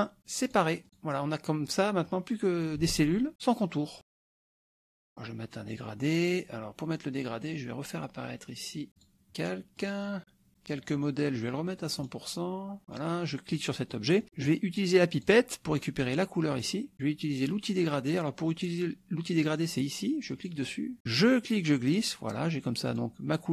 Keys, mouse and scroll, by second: 0.5 click, 0.8 click, 1.7 click, 2.0 click, 3.0 ctrl+a, 4.0 KP_Subtract, 4.2 middle click, 4.7 click, 4.7 middle click, 9.0 click, 9.8 click, 10.5 click, 12.0 right click, 12.8 middle click, 13.6 click, 13.9 middle click, 15.2 click, 16.6 click, 20.3 click, 21.3-22.5 drag, 22.9 click, 23.4-23.5 drag.